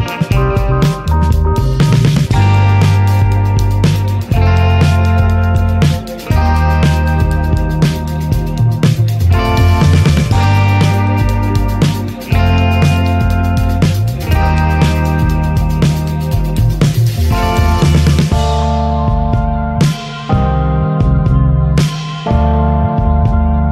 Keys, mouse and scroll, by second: 0.0 alt+shift+click, 0.3 alt+shift+click, 0.7 middle click, 1.3 alt+shift+click, 1.8 alt+shift+click, 2.2 middle click, 2.8 alt+shift+click, 3.4 alt+shift+click, 3.7 middle click, 3.8 scroll up 2, 4.4 alt+shift+click, 4.9 alt+shift+click, 5.2 middle click, 6.0 alt+shift+click, 6.7 ctrl+z, 7.0 alt+shift+click, 7.7 alt+shift+click, 8.0 middle click, 8.6 alt+shift+click, 9.1 alt+shift+click, 9.4 middle click, 10.3 alt+shift+click, 10.8 middle click, 11.4 alt+shift+click, 12.2 alt+shift+click, 12.9 ctrl+z, 13.2 alt+shift+click, 13.6 middle click, 14.4 alt+shift+click, 14.7 scroll down 1, 15.0 middle click, 15.9 ctrl+z, 16.3 alt+shift+click, 16.9 scroll down 1, 17.0-19.1 middle drag, 19.1 ctrl+s, 19.4-20.6 middle drag, 20.6 alt+z, 20.8 middle click, 21.6 alt+z, 22.0 alt+middle click, 22.2 alt+z, 22.6 shift+middle click, 22.6 scroll up 5, 23.2 ctrl+click.